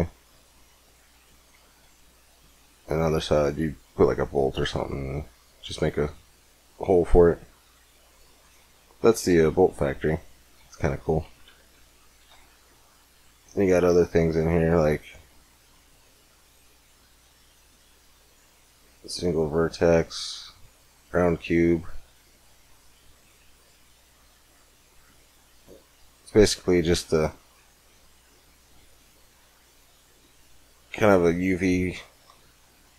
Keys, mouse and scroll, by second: 1.7-3.2 middle drag, 4.1-7.4 middle drag, 7.9-9.1 right drag, 8.1 x, 9.0 x, 9.5 shift+a, 11.4 KP_1, 12.0 shift+a, 12.8 click, 24.0 click, 24.4-25.6 drag, 26.2 middle click, 27.2-29.1 drag, 29.3-32.9 middle drag.